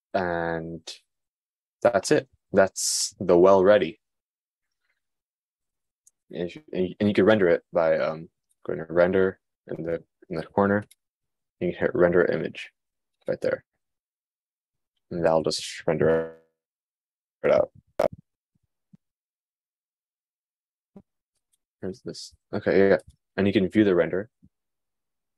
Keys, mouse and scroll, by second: 23.8 click, 23.9-25.3 middle drag.